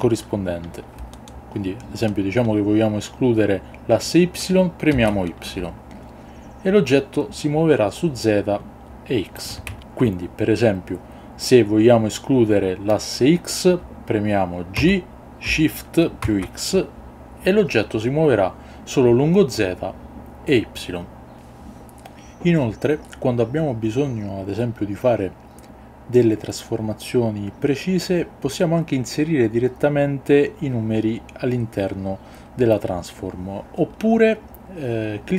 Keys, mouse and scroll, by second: 4.9 shift+y, 9.4 click, 9.7 ctrl+z, 14.7 g, 16.2 shift+x.